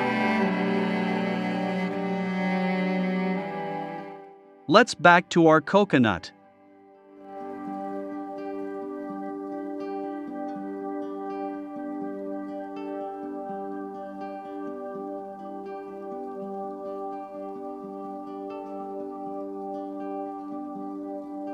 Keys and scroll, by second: 11.0-11.9 typing, 14.4 i, 16.6 v.